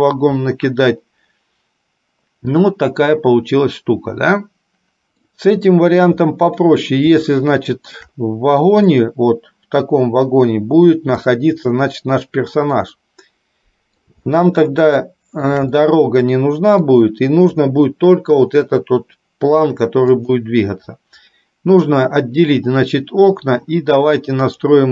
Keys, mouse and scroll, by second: 5.0 middle click, 7.6 shift+middle click, 9.3-11.6 middle drag, 13.4-14.5 middle drag, 14.6-17.0 shift+middle drag, 20.4 click.